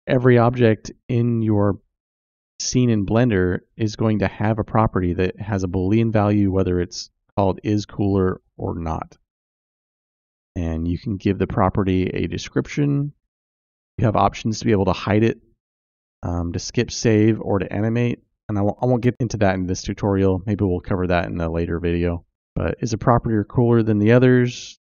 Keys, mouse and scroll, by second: 10.2-24.8 drag, 18.5 o, 21.3 BackSpace.